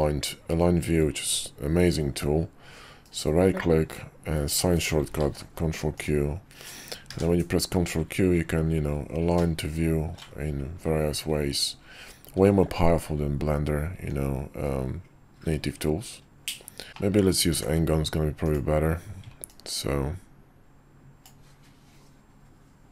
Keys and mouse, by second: 7.1 ctrl+q, 16.9 shift+middle click, 17.5 d, 19.5-21.3 drag.